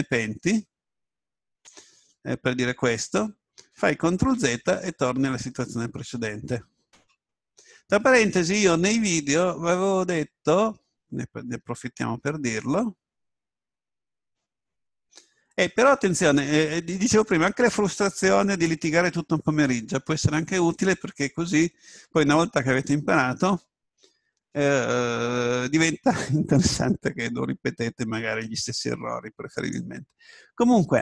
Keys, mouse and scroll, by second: 0.0 s, 1.7-3.7 drag, 4.2 ctrl+z.